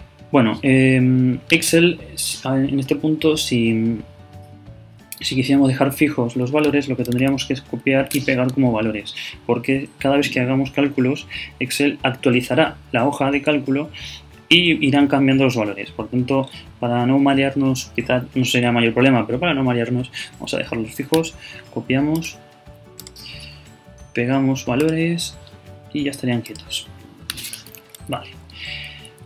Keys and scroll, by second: 7.3 shift+super+Down.